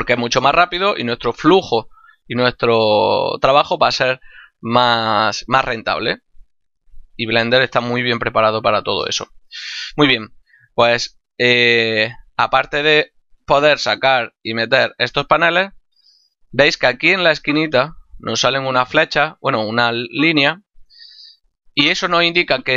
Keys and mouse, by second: 0.1 n, 0.7 t, 9.5 middle click, 13.1 n, 13.6 t.